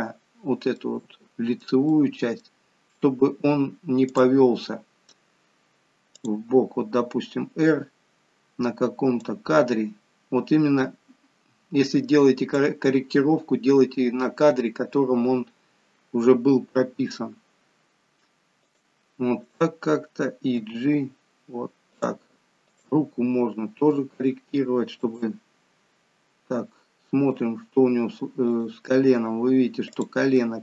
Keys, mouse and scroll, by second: 0.8 middle click, 1.9 middle click, 4.1 click, 4.7 middle click, 5.4-6.1 scroll up 1, 6.1 click, 6.1 scroll up 1, 16.7 r, 19.5 click, 20.6 g, 22.7 click, 24.1 r, 26.8 middle click, 28.5 click, 29.9 click, 30.3 middle click.